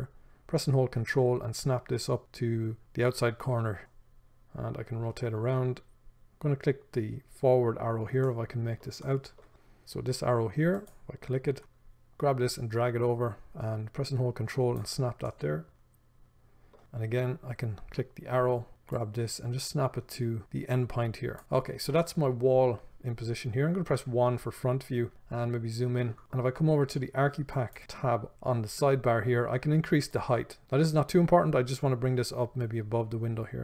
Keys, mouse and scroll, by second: 11.1 click, 11.6-18.3 shift+middle drag, 18.3 click, 21.6-22.2 scroll down 1, 22.2-27.7 middle drag, 24.2 KP_1, 27.7 click, 30.3-33.6 drag.